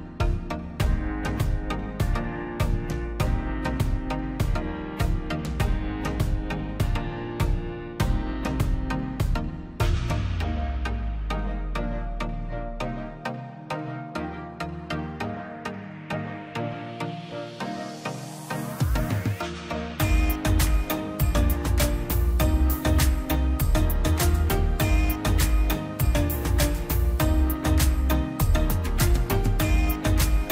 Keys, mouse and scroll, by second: 0.1 middle click, 0.3 scroll down 1, 0.6 middle click, 0.9-1.2 scroll up 1, 1.2 click, 2.3 click, 3.1 scroll down 1, 3.9 click, 4.4 scroll down 1, 4.9 click, 5.1 scroll down 1, 5.4-6.8 middle drag, 6.8-7.3 scroll up 1, 7.3 middle click, 7.6 middle click, 7.7-8.2 scroll up 1, 8.6 middle click, 9.3 click, 12.1-12.6 scroll down 1, 13.1 scroll up 1, 13.2 click, 16.1 click, 16.9 space, 17.2 click, 17.4 scroll up 1, 18.9 click, 19.9 scroll down 1, 20.3 space, 20.5 scroll down 1, 20.9 middle click, 21.5 scroll down 1, 22.4 middle click, 22.4-22.7 scroll up 1, 22.9 click, 24.9 click, 25.2-26.0 scroll up 1, 26.8 click, 27.1-27.5 scroll up 1, 27.5 click, 27.7 scroll up 1, 28.1 click, 28.8-29.1 scroll down 1, 29.6 click, 29.8-30.2 scroll up 1, 30.2 click.